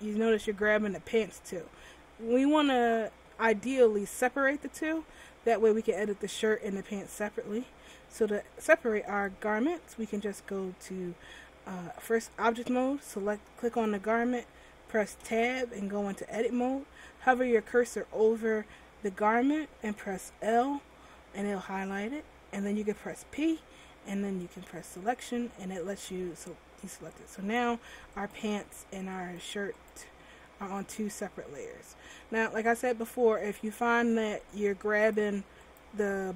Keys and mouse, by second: 8.6 click, 10.4 click, 12.2-15.7 drag, 15.7 Tab, 20.5 l, 23.4 p, 26.3 Tab, 27.6-29.6 drag, 29.9-31.0 drag, 31.0-36.3 right drag.